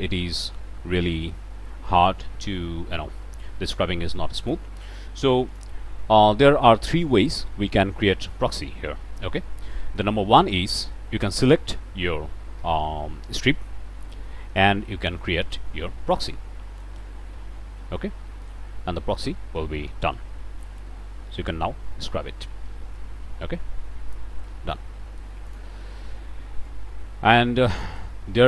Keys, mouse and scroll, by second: 5.5 click, 11.3 click, 16.1 click, 18.3 scroll down 1, 18.5-19.2 scroll up 1, 20.6-24.9 drag, 25.5 click, 26.6-28.2 drag.